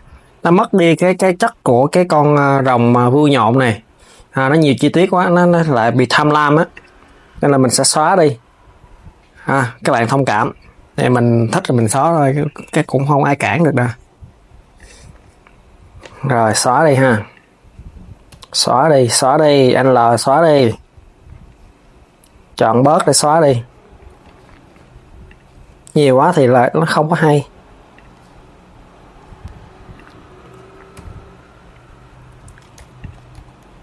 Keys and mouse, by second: 3.0 click, 6.4 click, 14.4 click, 14.7 l, 17.0 click, 18.0 l, 25.0 click, 25.9 l, 29.6 click, 30.6 l, 33.0 KP_3, 33.6 Tab, 33.7 click.